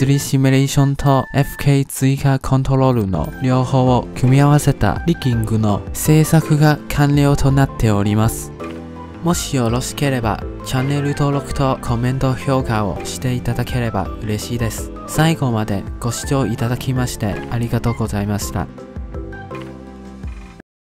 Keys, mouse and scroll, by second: 0.1 click, 0.5 ctrl+Tab, 0.9-1.2 shift+middle drag, 1.2-1.8 scroll up 1, 1.8 click, 2.2 middle click, 3.0-6.0 drag, 6.1-10.4 drag, 13.0-14.9 drag, 16.6-19.0 alt+drag, 19.7-20.8 drag.